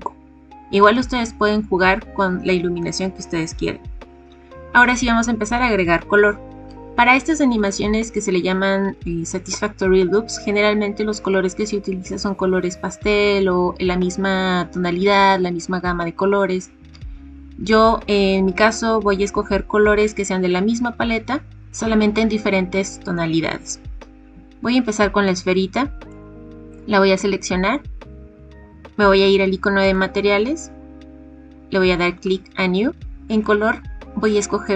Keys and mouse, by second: 26.3 click, 27.3 middle click, 29.8 click, 32.2 click, 33.4 click.